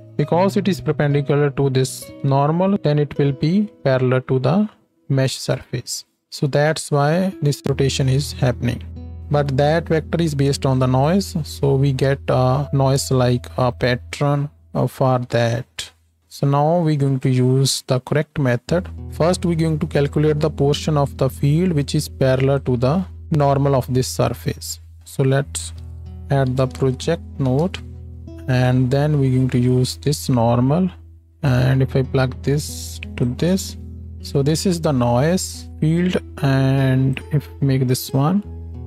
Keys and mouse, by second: 0.0 click, 12.1 space, 12.6 space, 19.0-21.8 drag, 19.0 x, 28.5-30.0 drag.